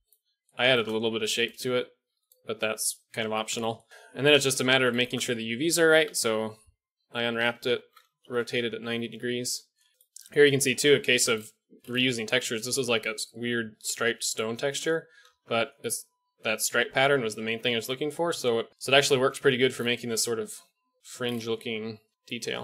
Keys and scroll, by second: 0.5 ctrl+r, 3.9 a, 5.8 u, 6.0 u, 7.2 a, 7.9 r.